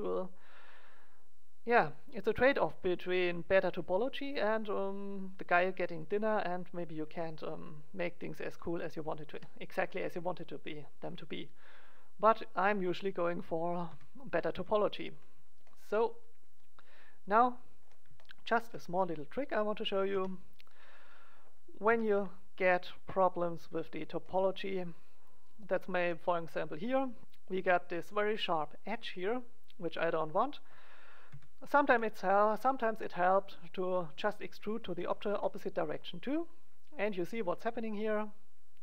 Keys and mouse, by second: 5.9-7.7 drag, 6.9 ctrl+a, 9.0 click, 9.2 Tab, 13.8 KP_1, 14.4 KP_3, 18.9 middle click, 20.1 Tab, 20.9 right click, 21.8 click, 21.8 e, 23.9 click, 27.1 middle click, 30.1-31.7 drag, 31.2 KP_1, 31.7 right click, 31.9 KP_3, 34.9 e.